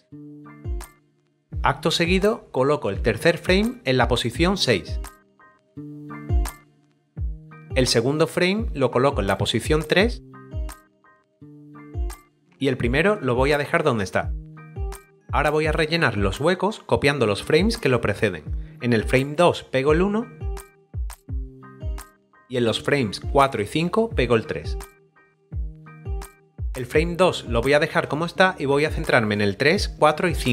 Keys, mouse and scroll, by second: 2.1 click, 4.4 right click, 5.1 click, 5.5 right click, 5.6 click, 5.8 right click, 5.9 click, 6.1 right click, 6.3 click, 6.6 right click, 7.0 click, 8.9 right click, 10.2 click, 10.7 double right click, 10.7 click, 11.0 right click, 11.1 double click, 11.2 right click, 11.4 click, 11.6 double right click, 11.7 click, 12.0 right click, 12.3 click, 20.2 right click, 20.6 double click, 20.9 click, 21.1 right click, 21.1 click, 21.4 right click, 21.5 double click, 21.7 click, 25.1 right click, 25.3 double click, 25.3 click, 25.4 double right click, 25.5 double click, 25.6 click, 25.7 right click, 25.8 click, 25.9 double click, 26.2 b.